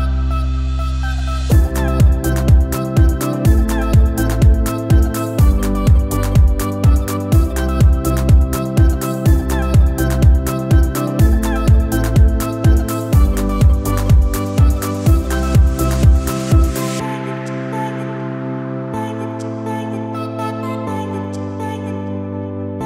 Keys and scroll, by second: 0.3 ctrl+0, 20.2 1, 20.8 4, 22.4 c.